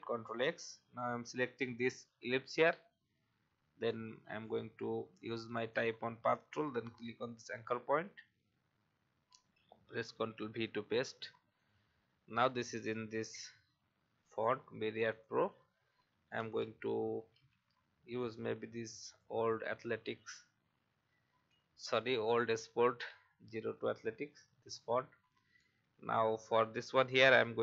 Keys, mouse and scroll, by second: 1.3 click, 10.1 ctrl+v, 11.5 click, 16.4-17.8 typing, 19.0 click, 23.8 shift+scroll down 1, 24.6-25.4 shift+scroll down 1, 25.6-26.5 alt+scroll down 1, 27.1 click.